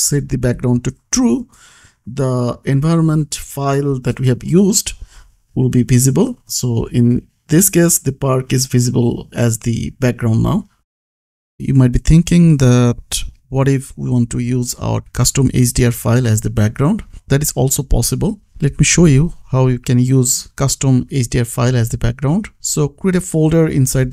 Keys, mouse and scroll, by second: 0.0-0.8 typing, 3.2-4.2 typing, 4.6 Return, 5.5 ctrl+s, 6.6 click, 10.8 click, 12.9 click, 19.9 click.